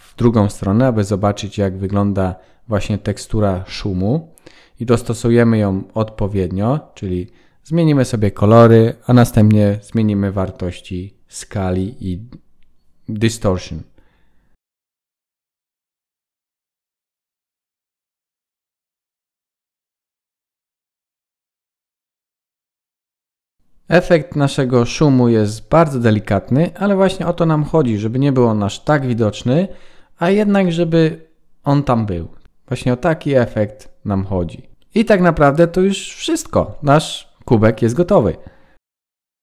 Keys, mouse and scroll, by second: 30.9 click, 31.8 click.